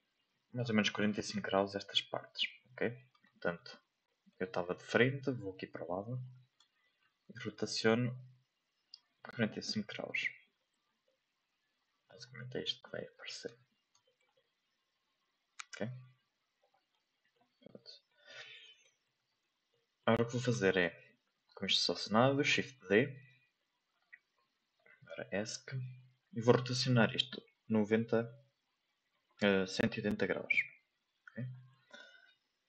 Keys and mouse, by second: 0.6 middle click, 2.3 shift+middle click, 2.6 middle click, 3.5 middle click, 4.0 middle click, 5.0-6.2 middle drag, 6.8 middle click, 7.5 r, 11.0-12.1 middle drag, 12.3 middle click, 12.9 middle click, 13.4 Tab, 14.0 middle click, 14.3-17.3 middle drag, 18.1 shift+middle click, 18.8 shift+middle click, 19.7 shift+middle drag, 29.1 r, 32.3 shift+middle click.